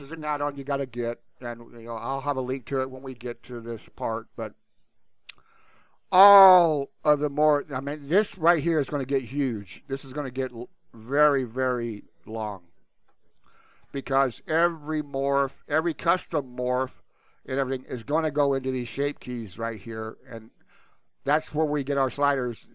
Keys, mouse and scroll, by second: 20.4 click.